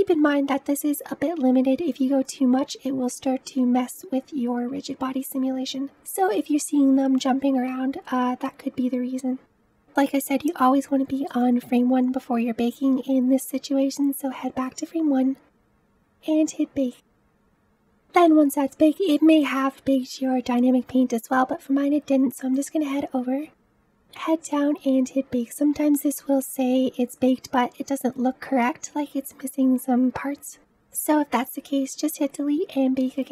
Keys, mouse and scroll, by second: 0.4 space, 0.6-8.1 shift+middle drag, 8.1-33.3 drag.